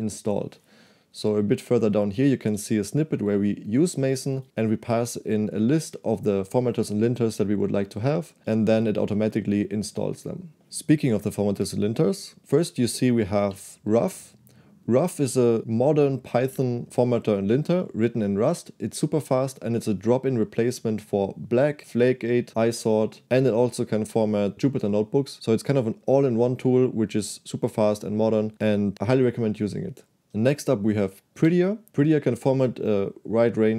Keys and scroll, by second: 1.3 Escape, 1.5-2.8 typing, 4.0 j, 4.2 j, 4.3 j, 4.5 j, 8.4 j, 8.4 j, 12.4-13.6 typing, 30.5 j, 31.4 shift+v.